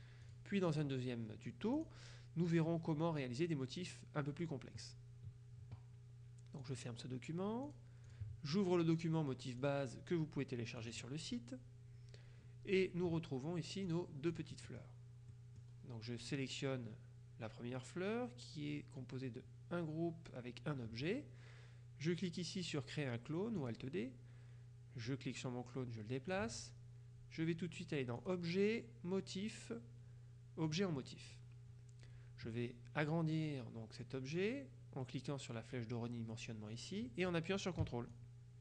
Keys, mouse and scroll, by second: 0.0-0.9 drag, 1.8 click, 2.6 click, 6.7 click, 7.7-8.7 drag, 9.7 click, 10.9 click, 14.0-16.2 drag, 15.4 middle click, 16.2 scroll up 2, 16.3 click, 23.7 click, 24.2-25.2 scroll up 2, 25.2-26.9 drag, 28.3 click, 30.8 click, 38.2-38.6 ctrl+drag.